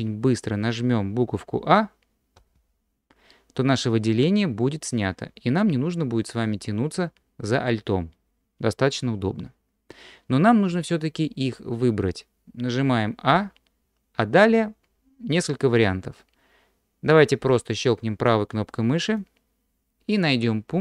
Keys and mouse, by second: 2.4 a, 2.6 a, 13.3 a, 19.2-20.8 drag.